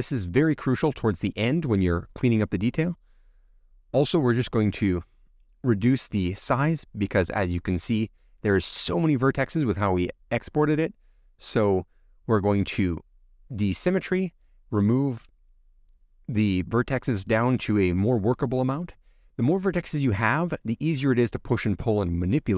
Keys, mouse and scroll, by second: 0.7 click, 1.4-2.9 drag, 5.6 click, 6.0-6.9 scroll up 27, 6.9 scroll down 2, 7.3-8.6 middle drag, 8.6-9.0 scroll down 8, 9.0 middle click, 9.5-9.9 scroll up 7, 9.9 middle click, 10.6-12.2 scroll down 11, 11.0 middle click, 20.3 click.